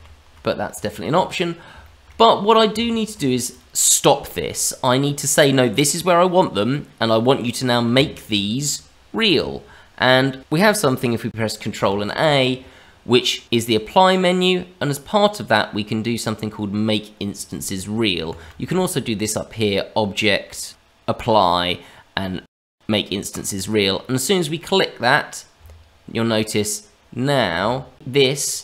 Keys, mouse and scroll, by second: 0.7 Tab, 1.8 shift+middle click, 2.3-2.7 scroll down 1, 2.7 Tab, 3.4 click, 6.7 middle click, 7.9 Tab, 9.3 Tab, 11.3 ctrl+shift+a, 19.1 click, 24.3-24.8 scroll down 1, 24.8-25.6 scroll up 2, 25.6 Tab, 26.5 middle click, 27.6 Tab, 27.9 click, 28.3 click.